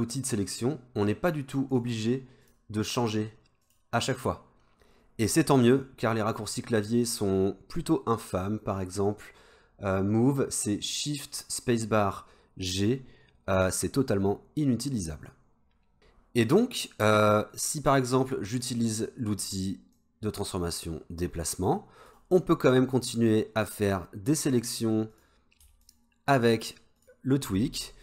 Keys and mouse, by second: 1.8-3.1 drag, 3.7-22.1 drag, 25.9 shift+click, 26.4 shift+click, 27.0 shift+click.